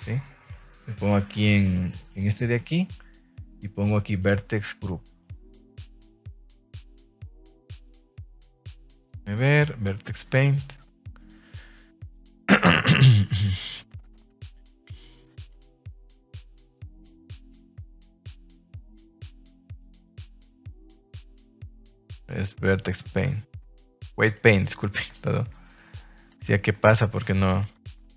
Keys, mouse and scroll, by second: 1.9 click, 4.0 click, 5.9 middle click, 7.9 click, 9.5 click, 14.8 click, 15.3 click, 16.1 click, 17.7 middle click, 18.6 Tab, 19.7 Tab, 21.2-24.4 drag, 24.8 middle click, 25.3 shift+middle click, 25.7 click, 26.7 middle click, 27.7 middle click.